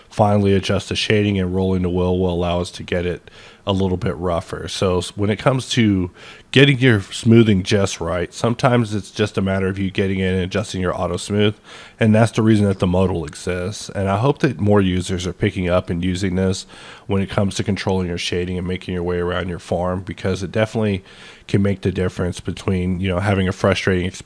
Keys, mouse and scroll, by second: 0.2-0.6 scroll up 4, 0.9-1.8 scroll down 8, 1.8-2.2 scroll up 5, 2.2-2.9 scroll down 5, 2.9 scroll up 5, 3.3-4.2 scroll down 5, 4.2-6.7 scroll up 4, 8.6 scroll down 1, 8.8-9.1 scroll down 1, 9.1-10.3 scroll up 4, 10.3-11.1 scroll down 3, 11.1-11.9 scroll up 3, 11.9-14.0 scroll up 2, 16.6-22.9 middle drag, 16.6 click.